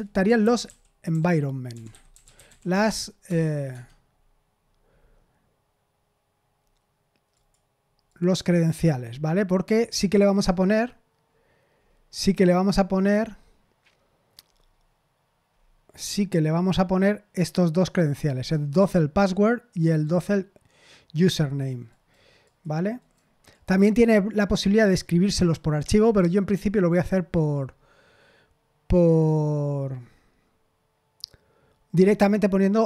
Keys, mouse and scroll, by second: 0.0-3.3 typing, 3.7 Tab, 7.3 click, 8.0 click, 8.5 click, 9.3-10.4 scroll down 1, 10.4-11.7 scroll up 1, 11.7-12.2 scroll down 2, 14.4-17.1 scroll down 5, 18.1 click, 20.0-21.6 drag, 22.0 right click, 22.4 click, 22.9 right click, 23.5 click.